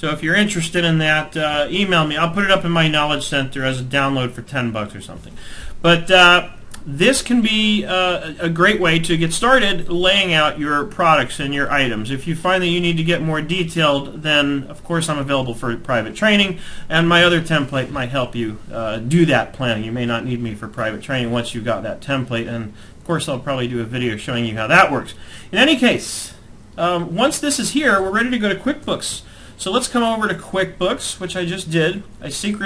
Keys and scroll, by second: 27.5 alt+Tab.